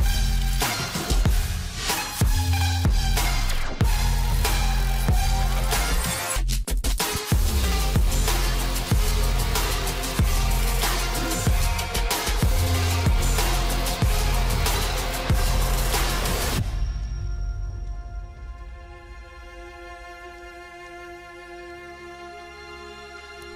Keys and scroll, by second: 10.7 ctrl+alt+z, 12.0 ctrl+j, 12.7 ctrl+l.